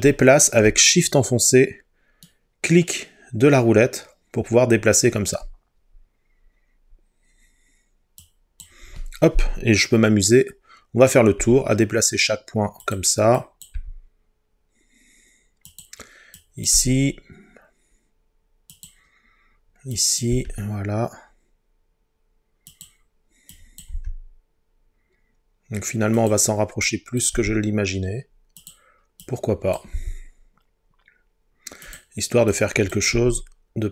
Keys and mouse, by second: 2.3 shift+middle click, 11.4 g, 12.9 click, 13.8 g, 15.7 click, 16.8 g, 18.7 click, 20.0 click, 20.3 g, 22.7 click, 24.0 g, 26.2 click, 27.4 g, 28.6-29.8 drag, 30.0 g, 31.9 click, 33.2 g.